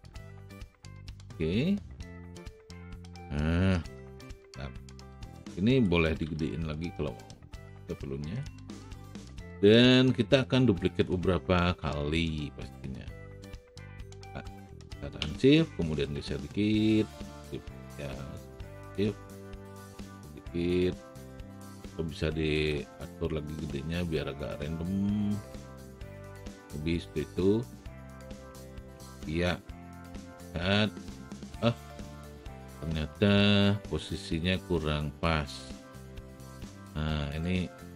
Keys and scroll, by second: 2.9 w, 6.3 r, 9.3 w, 22.6 r.